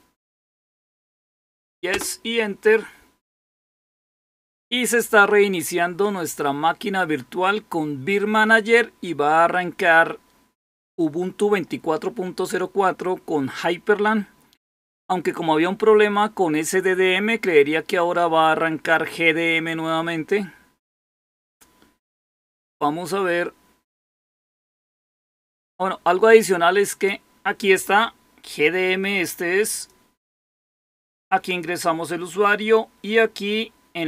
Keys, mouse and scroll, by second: 1.8 typing, 29.6 click.